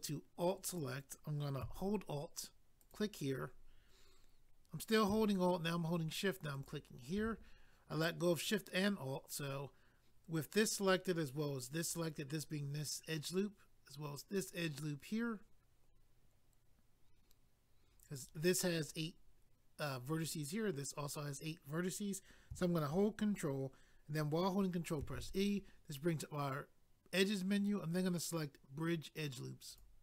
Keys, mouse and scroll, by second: 0.7 click, 0.8 click, 2.8 alt+click, 2.9 alt+click, 25.0 ctrl+e, 29.7 click.